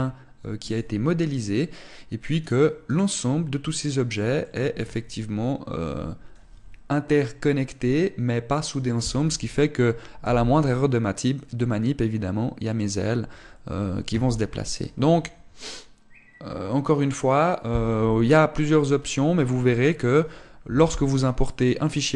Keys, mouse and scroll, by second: 10.8 g.